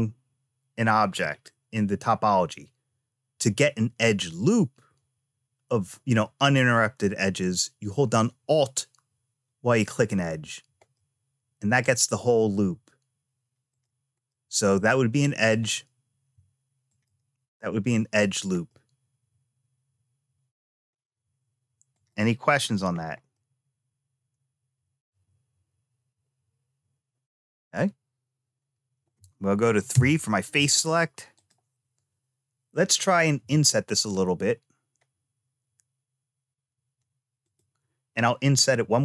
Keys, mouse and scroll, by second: 9.7 alt+click, 10.7 middle click, 11.6-12.8 scroll up 1, 13.5 click, 14.0-15.3 middle drag, 16.6 alt+click, 18.4-20.5 middle drag, 21.7 click, 22.4-23.1 scroll down 1, 23.1-24.8 middle drag, 27.3 click, 29.7 3, 31.1 click, 33.1 i, 38.5 i.